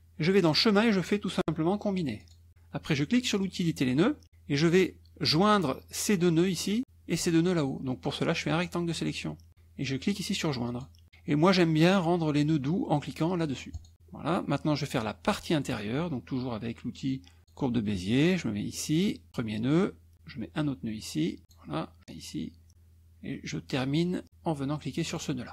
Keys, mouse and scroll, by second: 0.5 click, 2.3 click, 3.5 click, 8.7 click, 10.7 click, 13.8 click, 17.4 click, 19.3 click, 21.5 click, 25.2 click.